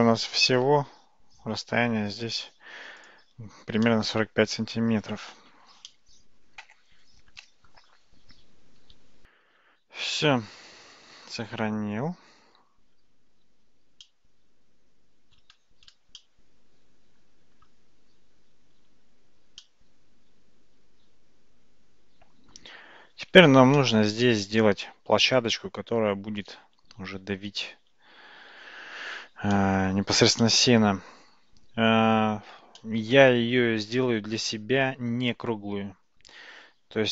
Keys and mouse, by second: 3.9-5.1 middle drag, 5.9-7.8 middle drag, 14.1-15.4 middle drag, 16.2-17.6 shift+middle drag, 19.7-22.6 middle drag, 23.8-24.3 shift+middle drag, 29.6-30.3 middle drag, 30.5-31.9 middle drag, 32.8-33.3 shift+middle drag, 34.5-35.5 middle drag.